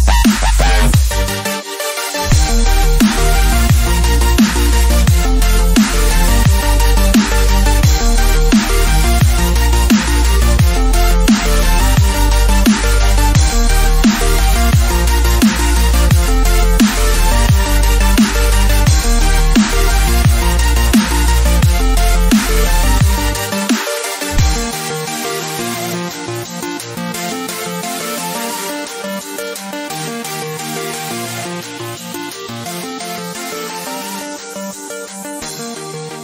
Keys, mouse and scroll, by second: 0.8 ctrl+-, 4.9 scroll up 1, 6.0 ctrl+=, 6.7 scroll up 1, 8.0 click, 8.9 ctrl+-, 10.6 click, 12.6 click, 13.6 ctrl+=, 15.1 scroll up 1, 16.7-34.9 drag, 35.9-36.2 drag.